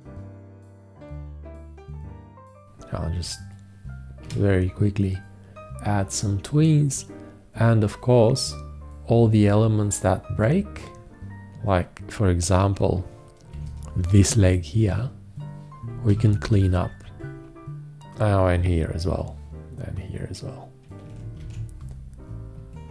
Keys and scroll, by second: 4.5 4, 13.8 v, 16.3 alt+q, 21.7 alt+q.